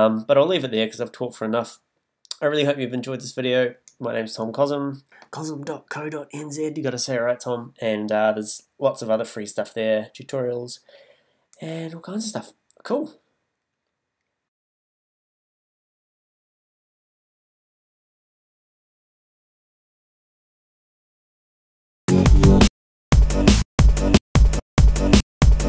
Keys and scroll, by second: 21.8 space.